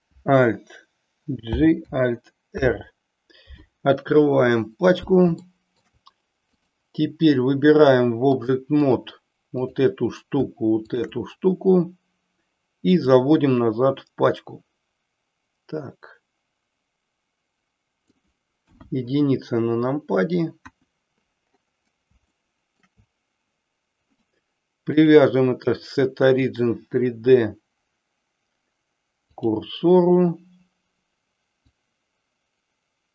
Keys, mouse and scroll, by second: 1.4 alt+j, 2.5 alt+r, 5.5-6.0 shift+middle drag, 6.6 click, 8.3 click, 9.7 click, 10.8 shift+click, 13.1-18.1 drag, 18.7 KP_1, 20.7 KP_1, 22.3-23.0 shift+middle drag, 25.0-29.4 drag, 31.8-33.1 drag.